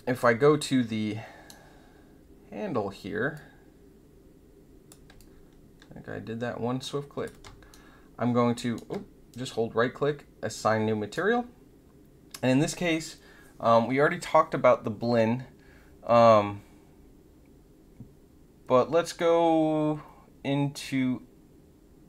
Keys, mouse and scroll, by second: 0.2-1.7 right drag, 3.3-4.8 drag, 5.1-7.2 alt+drag, 8.2 shift+middle click, 9.5-11.2 middle drag.